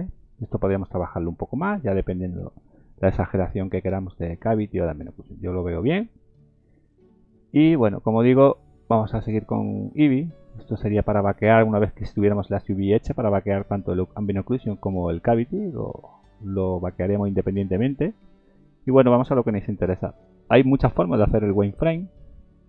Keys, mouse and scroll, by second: 10.2 click, 11.6-12.2 scroll down 2, 16.6 scroll down 4, 17.3 scroll up 1, 18.2 scroll up 1, 18.2-18.8 scroll down 4, 19.2 middle click, 19.2-19.5 scroll down 1.